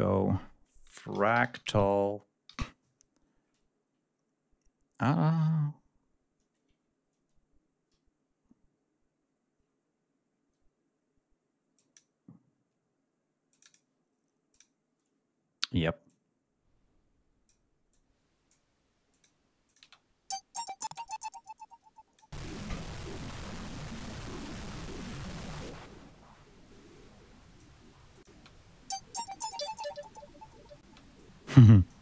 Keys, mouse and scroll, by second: 0.8-2.4 typing, 11.7 click, 13.4 click, 14.4 click, 16.0-17.6 drag, 17.8-18.6 drag, 19.0 click, 19.6 click, 19.7 space, 20.8 space, 21.0 click, 28.2 space, 30.7 space, 31.1-32.0 drag.